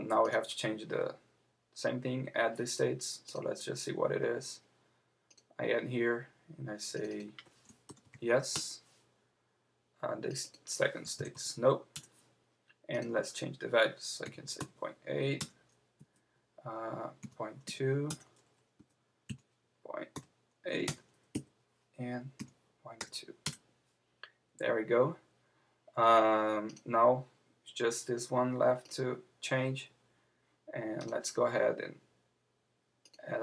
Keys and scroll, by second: 8.5 Return, 11.9 Return, 14.3 Return, 15.4 Return, 16.0 Right, 18.1 Return, 18.8 Down, 20.8 Return, 21.3 Left, 23.4 Return.